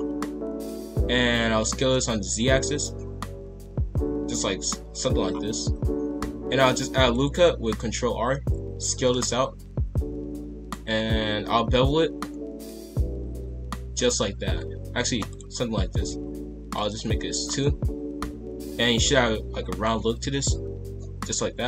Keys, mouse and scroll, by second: 1.4 s, 5.3-6.1 scroll down 4, 6.1 ctrl+r, 8.5 s, 11.5 ctrl+b, 16.7 click, 17.4 scroll down 1, 17.6 middle click, 18.4-18.9 scroll up 5, 18.9-21.6 middle drag.